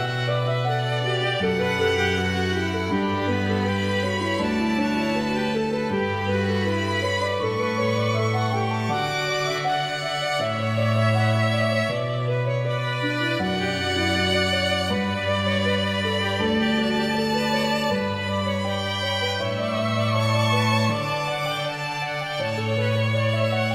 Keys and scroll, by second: 11.8 y, 19.6 ..